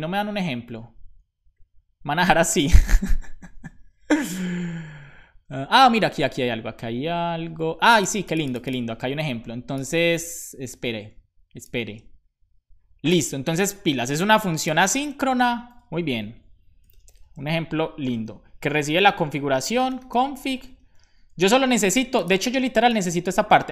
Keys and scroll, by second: 15.1 space, 15.3 BackSpace, 16.6-20.6 typing.